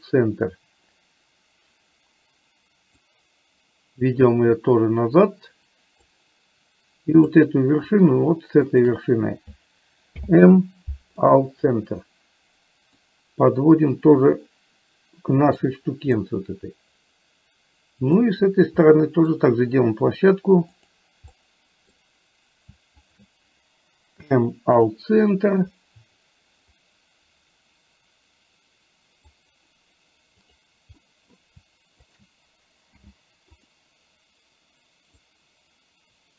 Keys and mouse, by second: 3.3-6.3 drag, 7.4 click, 10.1 m, 13.1-15.6 drag, 16.3-18.3 middle drag, 19.0 middle click, 20.9 click, 21.4 middle click, 23.1 shift+click, 24.4 m, 25.4 middle click, 26.9-29.4 drag, 31.1 middle click, 32.3 shift+click, 33.0 m, 35.3-36.3 drag.